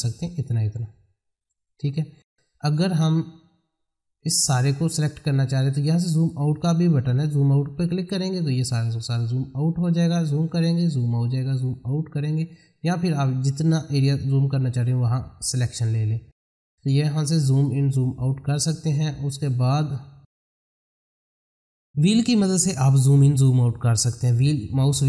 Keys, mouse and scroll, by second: 6.1 click, 10.1-17.6 drag, 24.3-24.7 scroll down 1.